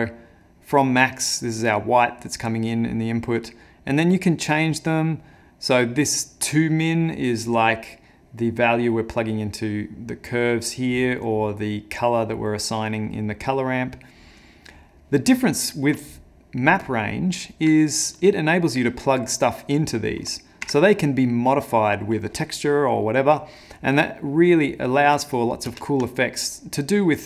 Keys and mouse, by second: 6.9 middle click, 10.6 middle click, 13.3 middle click, 14.6 middle click, 15.3 middle click, 16.7 click, 17.1 middle click, 17.8 ctrl+middle click, 19.2 click, 24.7 middle click, 25.9 ctrl+space.